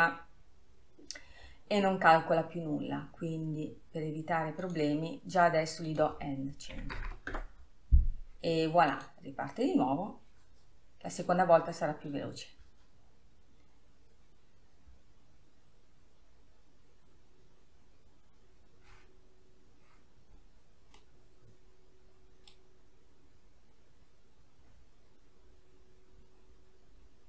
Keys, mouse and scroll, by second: 8.3-27.2 drag.